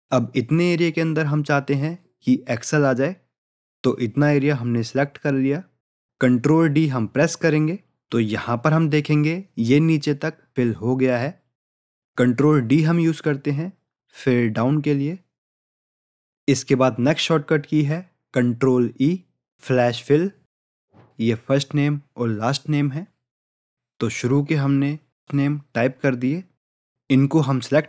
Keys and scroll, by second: 6.5 ctrl+d.